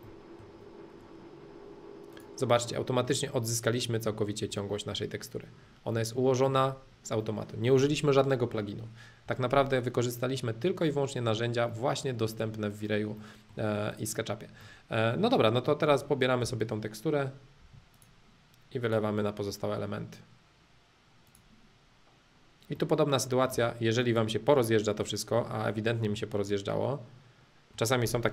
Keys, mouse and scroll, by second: 0.0 middle click, 0.5-0.8 scroll up 2, 0.8-2.1 middle drag, 2.1 click, 2.6-3.6 middle drag, 3.7 middle click, 6.0 middle click, 6.8-7.1 scroll up 2, 7.1 middle click, 10.0 middle click, 10.5 middle click, 11.6-13.9 middle drag, 13.9 click, 14.6-16.4 middle drag, 16.4 b, 17.9-19.9 drag, 21.2-22.7 drag, 22.7 middle click, 23.5 space, 24.0 click, 24.5 middle click, 24.6 scroll up 2.